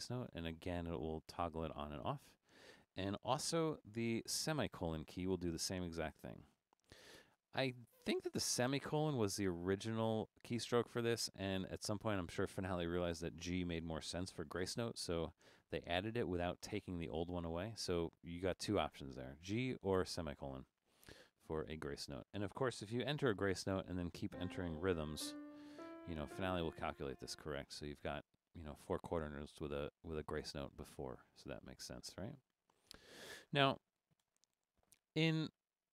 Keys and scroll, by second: 0.4-2.3 typing, 4.8 ;, 7.8-8.6 typing, 15.2-17.2 typing, 23.3 g, 24.6-26.7 typing, 31.9 Escape, 34.3 BackSpace.